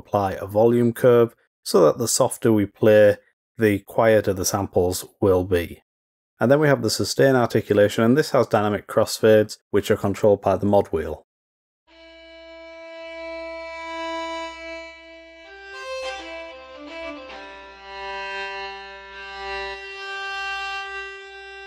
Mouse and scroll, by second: 7.2 click.